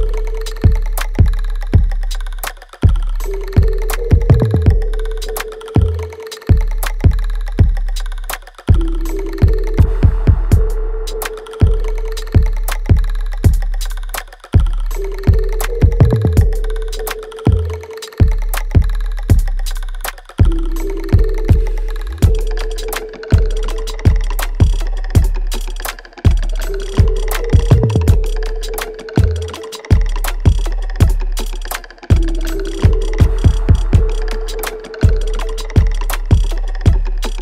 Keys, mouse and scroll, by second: 1.3 shift+click, 3.1 g, 4.3 alt+click, 4.7 alt+right click, 5.3-7.1 alt+right drag, 7.1 shift+click, 7.8 alt+click, 8.4 alt+middle click, 8.9 alt+right click, 9.8 shift+click, 10.5 click, 11.1 alt+middle click, 11.9 alt+click, 14.7 g, 17.7-19.4 drag, 19.4-22.3 drag, 22.3 right click, 22.9 click, 23.1 alt+right click, 23.6 alt+click, 24.3 alt+middle click, 24.9 alt+right click, 26.2-29.3 alt+drag, 29.3 alt+right click, 30.1 click, 30.6-32.5 alt+right drag, 32.5 click, 32.8 alt+middle click, 33.3 alt+right click, 33.7 click, 34.4-36.0 alt+drag, 36.0-37.4 alt+right drag.